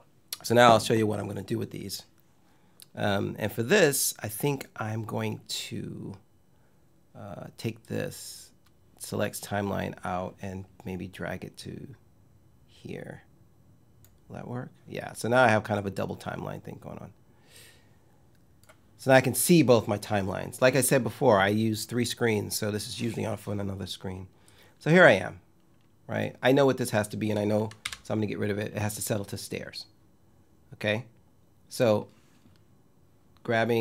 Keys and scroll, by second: 27.5 BackSpace.